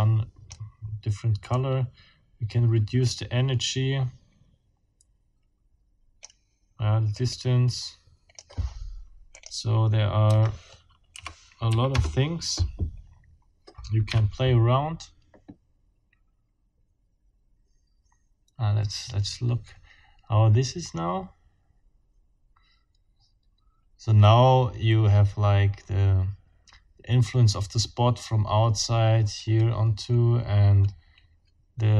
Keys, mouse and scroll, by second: 0.0 click, 1.5-2.9 drag, 3.1-6.4 drag, 7.1-8.6 scroll up 1, 9.4 scroll up 1, 10.3 KP_0, 11.1 KP_Decimal, 11.7 KP_5, 11.9 KP_Enter, 14.1 F12.